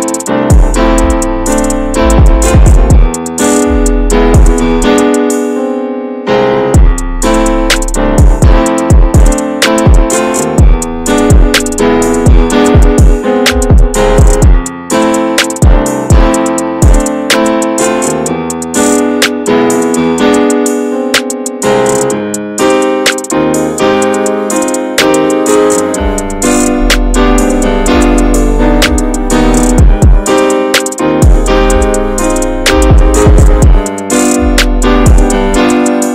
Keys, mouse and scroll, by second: 0.0 click, 0.9-3.2 shift+middle drag, 3.2 click, 4.4 click, 4.7-5.3 scroll up 4, 4.9 shift+middle click, 5.4 middle click, 5.8 shift+middle click, 6.0 scroll up 2, 6.2 middle click, 7.0 click, 7.8 click, 8.6 ctrl+z, 8.9 click, 9.8 click, 10.2 scroll down 2, 10.4 alt+middle click, 10.8 alt+z, 11.0 scroll down 1, 11.2 shift+middle click, 11.4 scroll up 1, 11.5 alt+z, 11.8-12.4 scroll down 1, 12.4 drag, 16.9 ctrl+r, 23.7 scroll down 1, 24.0 middle click, 24.3 Tab, 24.9 alt+z, 25.3 click, 25.6 4, 27.1 ctrl+r, 28.0 alt+middle click, 28.4 alt+z, 28.6 scroll up 1, 28.8 shift+middle click, 29.5 ctrl+click, 30.4 click, 31.9 click, 33.5 click, 34.2 click, 35.6 alt+z, 36.0 scroll down 2.